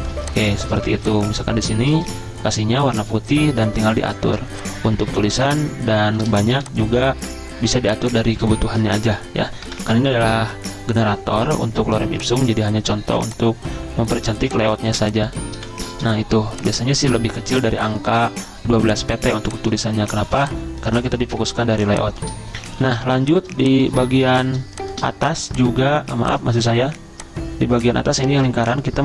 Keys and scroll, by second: 0.6 v, 2.1 d, 6.6 t, 9.5 ., 10.1 ctrl+shift+Down, 10.5 Delete, 14.4 z, 15.1 z, 15.6 v, 21.4 z, 23.1 z, 24.2 v.